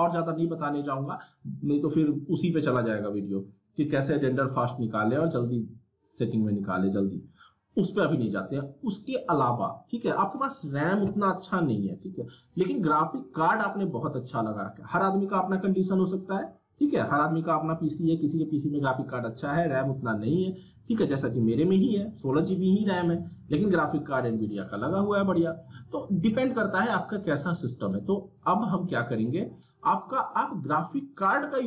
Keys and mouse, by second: 0.3 click, 7.9 click, 9.0 click, 27.9 click.